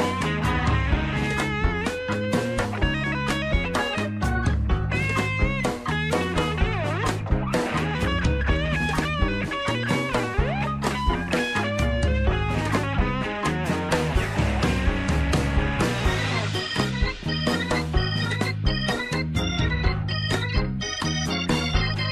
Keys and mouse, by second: 0.3 Tab, 0.9 shift+middle click, 1.2-2.4 middle drag, 3.2 middle click, 3.6 Tab, 4.2 middle click, 7.0 shift+middle click, 7.7 middle click, 8.4 shift+middle click, 9.8 ctrl+r, 12.8 shift+middle click, 14.5 ctrl+r, 18.0 shift+middle click, 19.0 shift+middle click, 22.0 Tab.